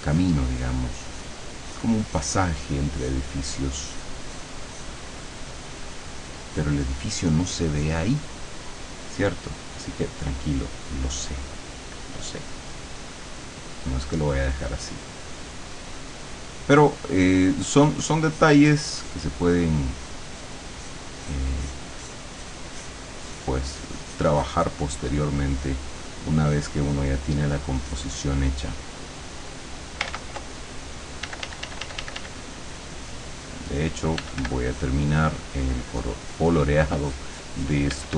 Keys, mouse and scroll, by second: 2.5 middle click, 10.1-12.9 drag, 13.9-15.6 drag, 16.8-18.9 drag, 20.0 click, 20.8-22.0 drag, 23.3-25.3 drag, 25.6 click, 27.8-29.9 drag, 30.1 ctrl+z, 31.3 d, 32.4-34.2 drag, 34.3 f, 34.8 click, 35.7 click, 37.1-38.1 drag, 38.0 f.